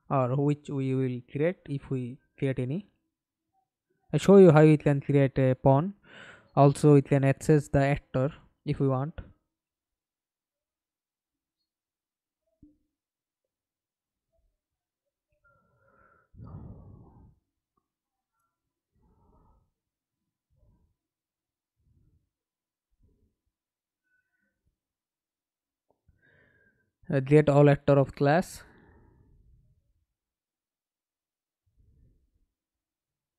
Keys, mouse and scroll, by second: 0.7 ctrl+space, 1.3 right click, 10.3 right click, 10.8 right click, 11.4-14.7 typing, 17.1 right click, 20.1-21.1 typing, 23.0 BackSpace, 23.3 a, 24.4 l, 25.1 Return, 28.9 middle click, 31.6 right click.